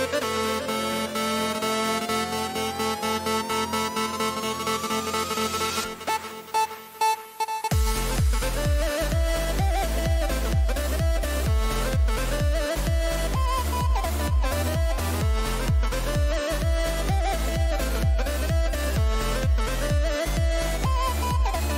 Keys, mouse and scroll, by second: 0.4 right click, 1.3 KP_Decimal, 3.1-5.5 middle drag, 6.1 middle click, 7.4 middle click.